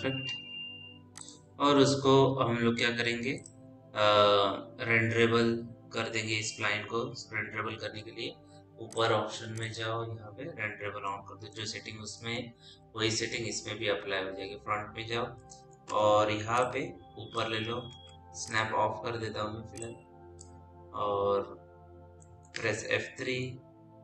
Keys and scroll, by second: 13.1 p, 13.6 f, 15.7 w, 18.3 ctrl+z, 23.0 F3.